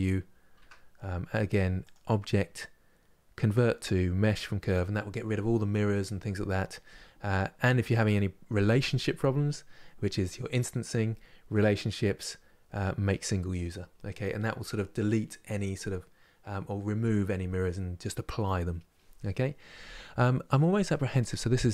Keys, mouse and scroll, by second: 0.3 Tab, 0.7-1.5 scroll up 1.